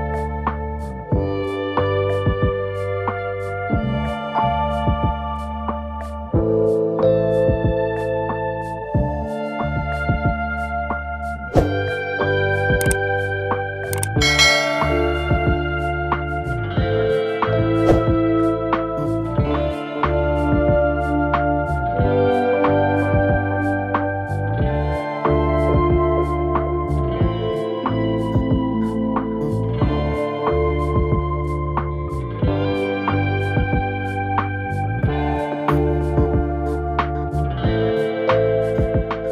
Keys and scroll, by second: 33.7 ctrl+v.